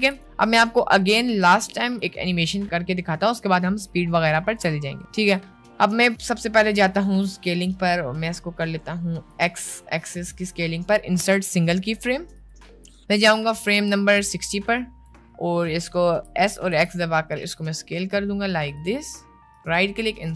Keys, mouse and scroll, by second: 0.1 space, 1.1 click, 1.5 a, 1.6 x, 2.6 middle click, 6.8 middle click, 9.4-12.5 middle drag, 13.6-15.0 drag, 15.6 middle click, 16.3 s, 19.6-20.3 right drag.